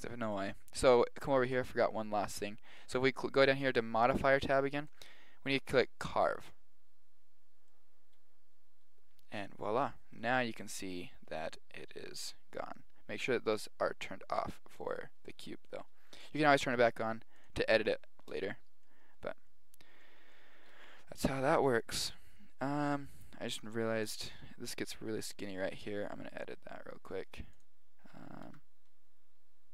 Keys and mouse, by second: 4.8 click, 7.7-9.5 middle drag, 9.7-12.6 middle drag, 12.7 middle click, 14.9-17.4 middle drag, 17.4-19.9 drag, 20.0 click, 22.2-23.2 middle drag, 23.2 right click, 24.0 KP_1, 25.6-27.3 middle drag, 27.5-29.3 drag, 28.4 Tab.